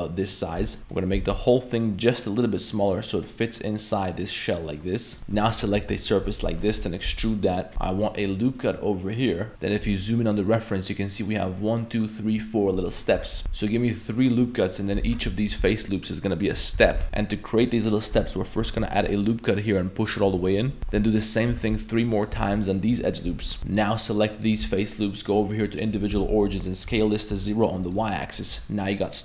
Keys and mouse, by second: 0.3 middle click, 0.8 shift+a, 0.8 middle click, 1.1 s, 5.2 ctrl+KP_Add, 6.6 shift+middle click, 7.0 e, 7.7 ctrl+r, 9.7 middle click, 13.3 ctrl+r, 13.4 ctrl+r, 15.1 3, 15.4 alt+right click, 16.0 alt+shift+right click, 16.4 alt+shift+right click, 16.9 ctrl+z, 17.0 ctrl+r, 18.6 ctrl+r, 20.8 ctrl+r, 20.8 ctrl+z, 20.9 ctrl+r, 21.6 ctrl+r, 22.4 ctrl+r, 23.3 3, 23.7 alt+shift+right click, 24.0 alt+shift+right click, 24.4 alt+shift+right click, 25.3 click, 26.1 s.